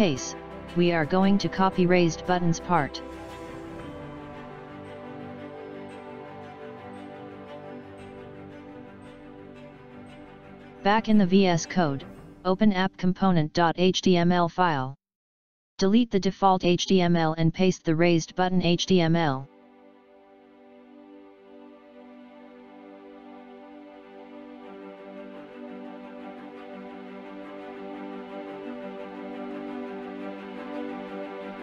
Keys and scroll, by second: 19.2 Up, 20.4 Down, 20.8 Left, 22.2 Right, 23.6 Right, 26.8 ctrl+v, 27.6 Up.